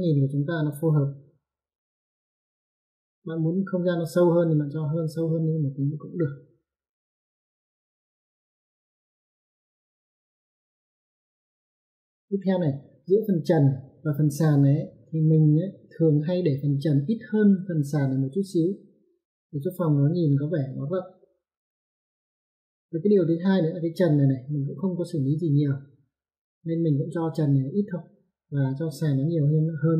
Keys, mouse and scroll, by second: 4.8 click, 11.4 click.